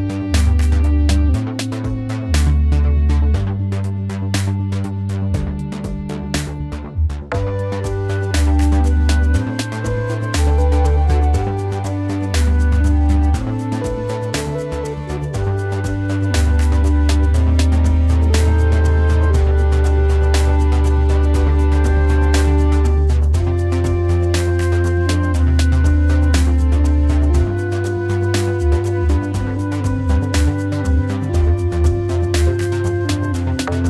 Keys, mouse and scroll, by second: 8.8 ctrl+z, 9.3 ctrl+alt+z, 10.8 ctrl+z, 11.8 ctrl+z.